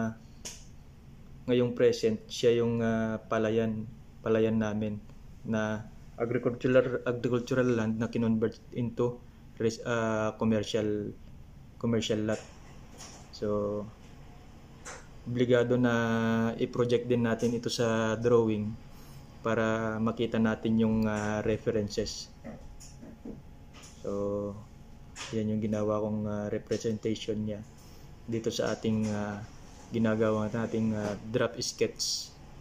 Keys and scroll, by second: 4.5 ctrl+v, 6.7 Delete, 8.1 ctrl+c, 11.6 ctrl+c, 11.7 ctrl+v, 16.5 ctrl+c, 16.5 ctrl+v, 27.4 ctrl+v, 28.3 ctrl+c, 28.4 ctrl+v.